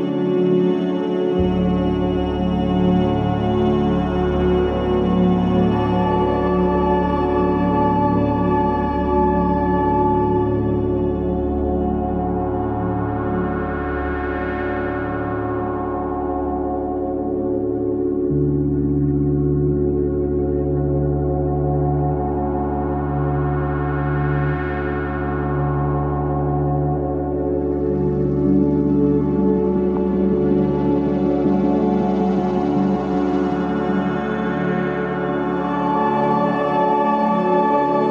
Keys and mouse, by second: 1.3-1.8 middle drag, 5.3 click, 8.2-9.4 middle drag, 15.5 g, 29.2-29.9 middle drag, 30.7 middle click, 33.3-33.7 shift+middle drag, 35.1 shift+d.